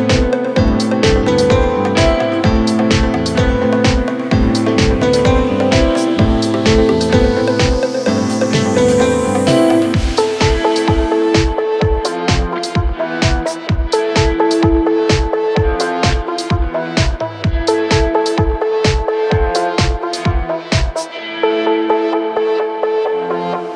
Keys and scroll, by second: 10.8-16.9 typing, 20.4 ctrl+k.